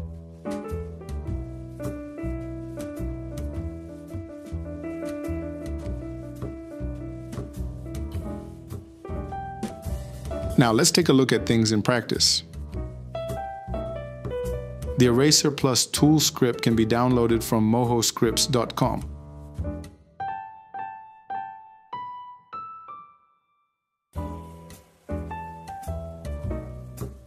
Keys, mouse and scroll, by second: 0.4 Escape, 6.2 click, 7.4 click, 16.9 ctrl+z, 17.3 t, 17.4 BackSpace, 18.5 BackSpace, 20.0 e, 21.4 p, 23.2 Tab, 23.5 t, 24.2 g, 24.5 ctrl+c, 24.5 ctrl+v, 25.8 Escape.